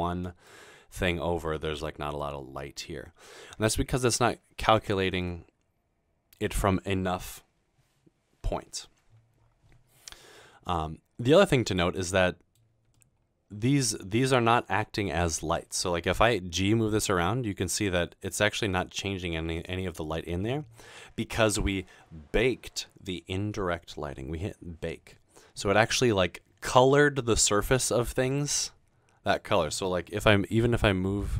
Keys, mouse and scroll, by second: 1.8 middle click, 9.8-10.6 scroll down 2, 10.6 middle click, 11.7 click, 12.0 middle click, 13.0 middle click, 16.8 g, 30.7 g.